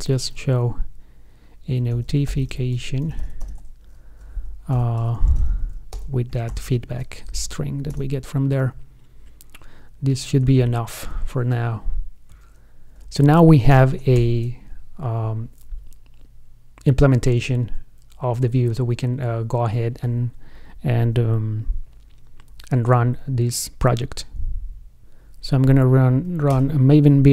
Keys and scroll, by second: 3.8 ctrl+space, 10.9 shift+super+f, 13.9 shift+super+o, 14.5 super+s.